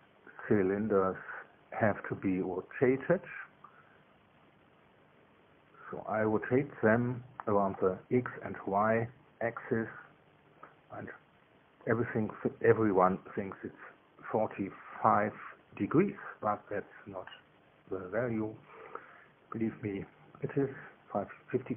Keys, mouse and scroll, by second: 6.9 click, 10.8 click, 13.2 click, 17.4 click, 19.2 KP_1, 19.5 Tab, 19.8 KP_1, 20.5 Tab, 21.2 KP_0.